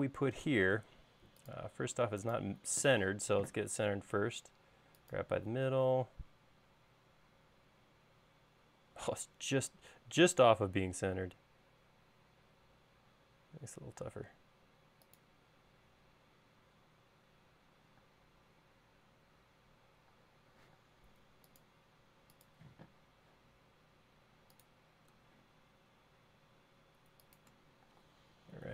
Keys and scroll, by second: 1.0 space, 3.3 m, 18.4-18.9 typing, 20.6-21.2 typing, 28.3 space.